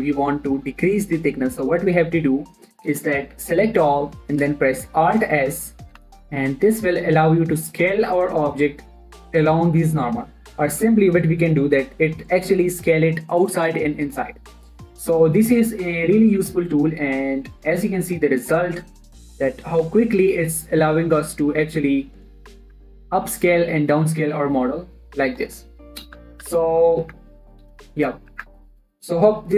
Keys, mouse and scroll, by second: 0.2 scroll up 1, 0.4 Tab, 3.7 a, 6.3 alt+s, 23.2 click, 24.4 alt+s, 25.9 right click, 26.6 ctrl+z, 27.6 a, 28.2 alt+s, 28.7 click, 28.9 Tab.